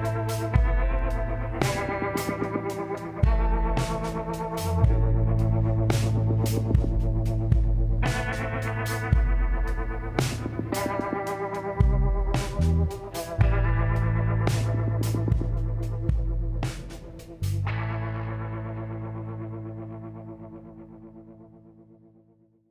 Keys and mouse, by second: 0.5 click, 1.2-2.2 middle drag, 3.8-5.5 drag, 7.5-9.3 middle drag, 9.5-11.3 drag, 10.9 l, 11.7-13.3 drag, 12.5 KP_1, 15.3-17.0 drag, 16.2 l, 17.2 g, 19.3 middle click, 20.5-22.0 drag, 21.9 z, 22.1 click.